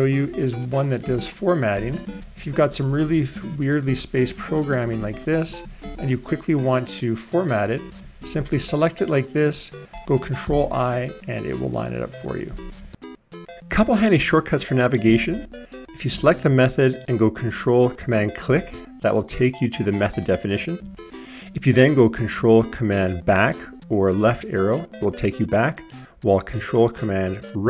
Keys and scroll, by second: 10.5 ctrl+i, 22.7 ctrl+super+Left, 26.5 ctrl+super+Right.